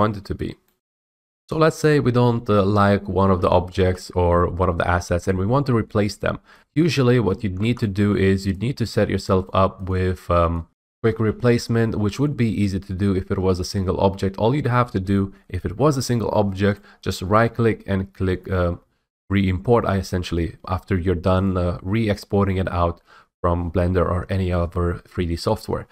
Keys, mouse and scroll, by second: 0.0-0.4 typing, 0.4 right click, 3.3-3.9 typing, 4.1-4.5 right drag, 5.3 scroll, 7.2 click, 7.6-8.6 typing, 8.0 right click, 9.1 click, 9.6 click, 10.3 click, 10.9 F8, 11.0 F8, 11.7-12.6 typing, 12.6-14.5 right drag, 16.9-19.0 right drag, 21.6-23.6 drag.